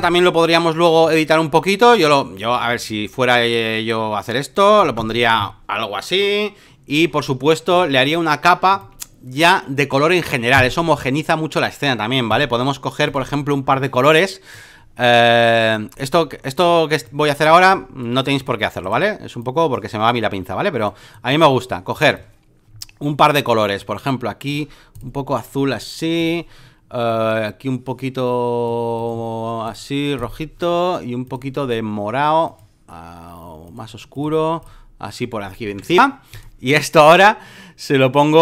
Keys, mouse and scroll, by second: 0.0-4.8 drag, 4.8 Return, 7.7-10.6 drag, 12.3-18.8 drag, 18.8 right click, 19.4-35.4 drag, 36.4-38.4 drag.